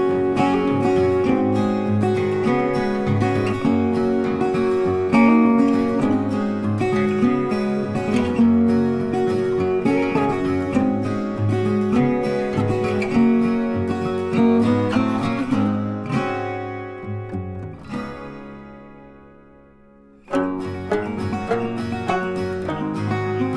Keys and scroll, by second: 17.4 ctrl+t.